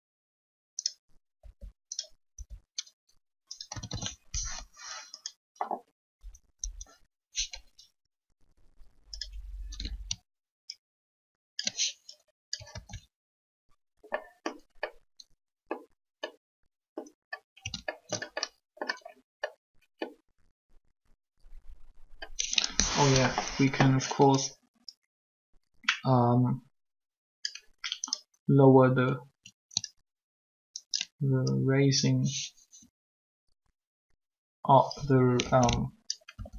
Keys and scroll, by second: 1.4 r, 2.3 r, 3.7 a, 3.9 a, 6.2 Up, 6.6 Up, 12.7 ctrl+alt+a, 23.2 3, 36.3 r.